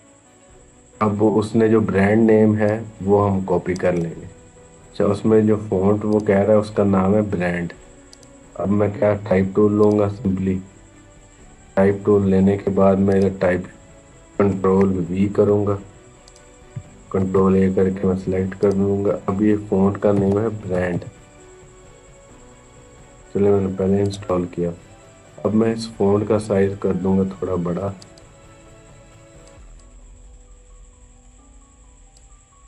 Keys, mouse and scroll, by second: 2.5-3.8 drag, 3.8 right click, 4.6 click, 8.7-9.6 scroll down 1, 9.6 click, 12.9 click, 15.0 ctrl+v, 16.1 click, 17.0 ctrl+a, 18.4 click, 19.4-21.2 typing, 23.8 click, 27.7-32.6 drag.